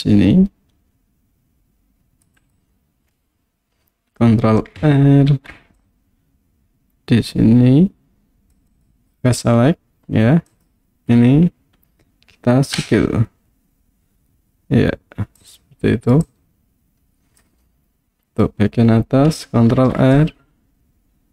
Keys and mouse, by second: 2.4 click, 5.3 ctrl+r, 8.7 click, 9.0 click, 10.5 alt+click, 12.8 s, 15.4 click, 16.3-17.5 drag, 19.7 ctrl+r.